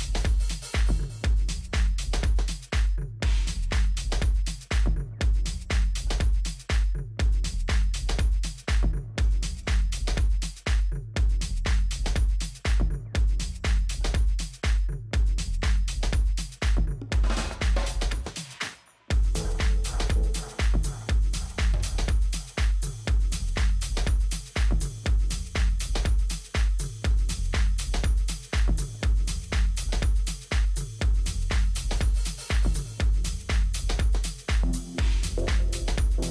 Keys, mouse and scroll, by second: 0.4 a, 1.1-2.8 middle drag, 1.1-3.0 right drag, 4.5 ctrl+b, 27.0-29.0 middle drag, 28.8 a, 32.1-33.7 middle drag, 34.7-36.3 middle drag.